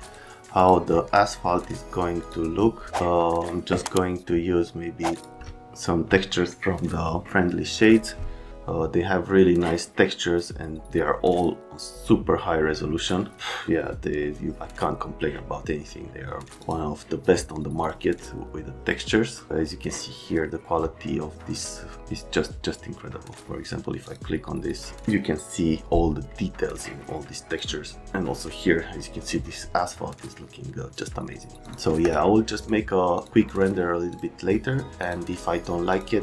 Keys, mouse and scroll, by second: 0.0 click, 0.6 click, 1.6 click, 2.2 click, 3.3 right click, 5.1 click, 7.8 click, 11.3 click, 16.6 click, 17.8 click, 24.0 click, 31.6 click, 32.0 click, 32.6 click, 33.2 click, 34.1 click, 35.0 click, 35.9 click.